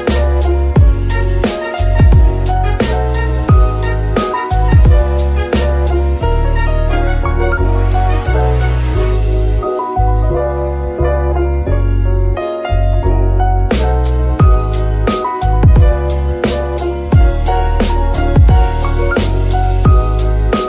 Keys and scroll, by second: 0.1 g, 0.2 z, 1.7 g, 2.3 Escape, 10.0 shift+g, 10.6 Escape, 11.2 KP_3, 11.7 g, 12.8 Tab, 15.9 shift+g, 16.3 Escape, 17.3 shift+g, 17.7 Escape, 19.9 KP_Divide.